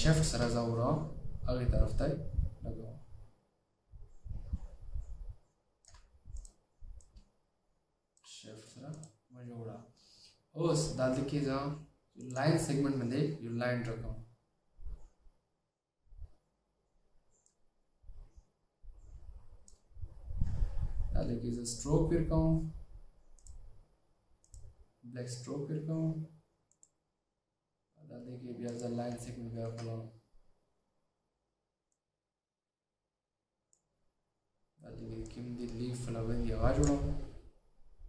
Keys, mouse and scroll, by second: 29.8-30.9 alt+scroll up 2.